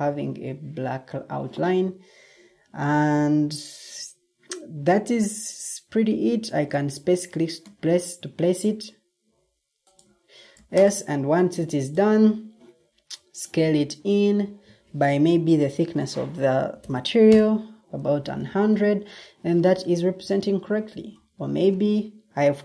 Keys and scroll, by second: 13.8 typing, 14.2 Return, 14.7 Escape, 22.5 Escape.